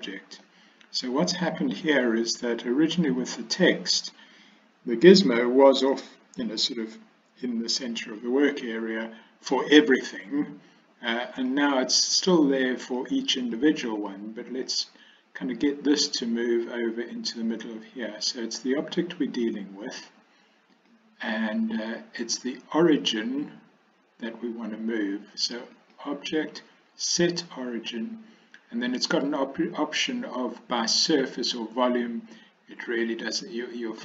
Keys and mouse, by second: 0.5-2.1 middle drag, 11.4 click, 12.2 click, 12.9 click, 13.5 click, 14.1 drag, 14.6 click, 20.8-23.4 drag, 25.8-34.0 drag.